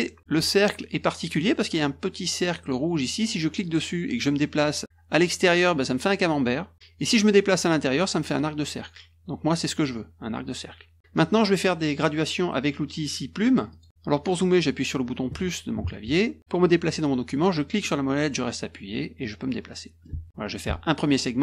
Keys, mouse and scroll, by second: 3.6 click, 13.7 click, 17.8-20.0 middle drag.